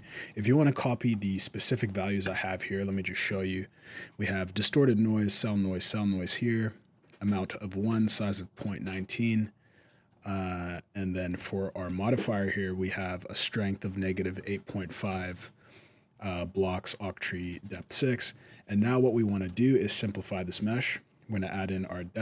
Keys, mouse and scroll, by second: 0.1 middle click, 0.4-0.9 scroll down 2, 0.9 scroll up 1, 1.1 middle click, 2.0 right click, 9.9 click, 17.9 middle click, 17.9 scroll up 1, 18.7 middle click, 19.2 alt+a, 19.7 right click, 21.2 click.